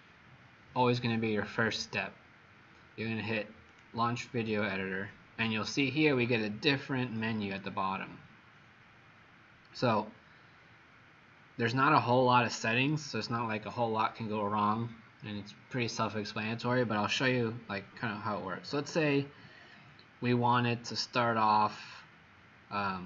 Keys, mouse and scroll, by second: 21.0 right click.